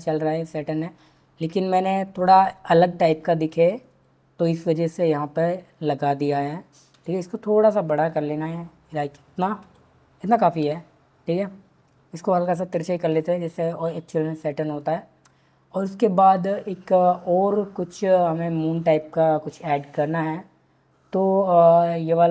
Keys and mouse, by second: 4.9 click, 6.9 s, 10.6 r, 12.7 click, 13.1 click, 18.6 click.